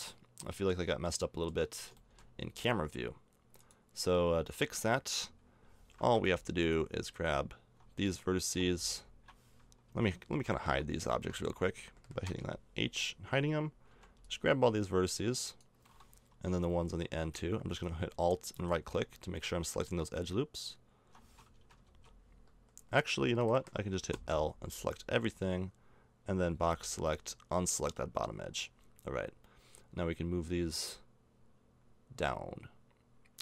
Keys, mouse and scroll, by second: 0.6 middle click, 3.6-6.3 drag, 6.3-9.8 right drag, 9.9 a, 10.7 l, 11.1 l, 12.3 h, 13.9 b, 21.9 ctrl+z, 24.1 l, 26.5 b, 28.5 click.